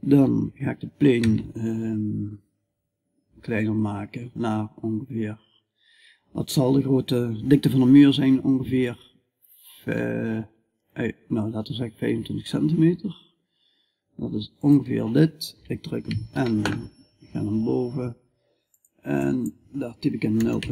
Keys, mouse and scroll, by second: 0.7 s, 15.5 n, 16.4-20.7 middle drag.